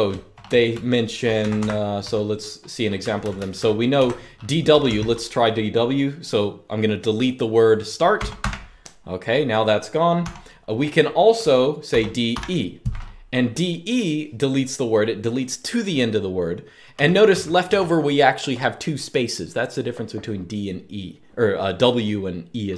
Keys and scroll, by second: 0.0-4.6 typing, 7.7-8.7 typing, 9.9 typing, 11.6-12.0 typing, 16.4-17.9 typing, 22.3-22.7 typing.